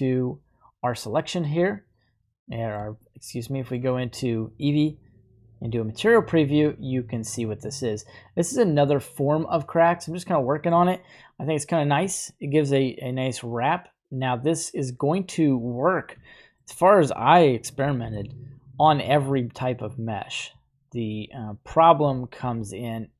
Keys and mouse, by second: 1.5-2.9 middle drag, 3.1-3.9 shift+middle drag, 4.2-4.7 middle drag, 8.2-10.9 middle drag, 11.0-12.1 shift+middle drag, 12.2 middle click, 15.7 right click, 16.3-16.7 shift+middle drag, 16.9 right click, 17.8 g, 18.1 y, 18.8 click, 20.1 click, 21.3 drag, 22.4 shift+a.